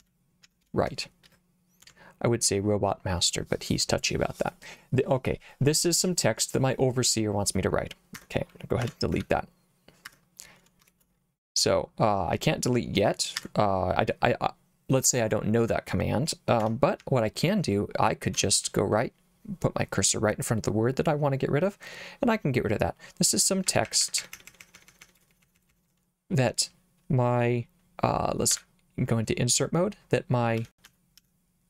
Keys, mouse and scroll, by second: 0.0-1.9 typing, 8.2 Escape, 8.9 Escape, 8.9-9.7 typing, 10.1 Escape, 10.9 shift+a, 13.4 Escape, 16.7 Escape, 17.1 h, 18.7 l, 23.7-25.9 typing, 28.6 i, 30.4-31.6 typing.